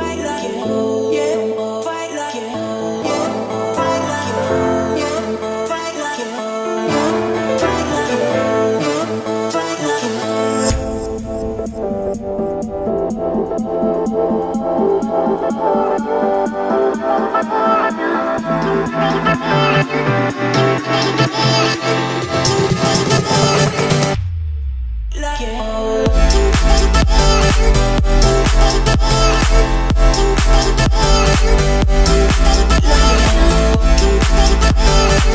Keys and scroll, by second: 3.0 Escape, 4.7 Escape, 8.2 Escape, 13.2 Escape, 23.3 Escape, 26.6 1, 26.7 0, 27.4 Return, 29.6 Delete.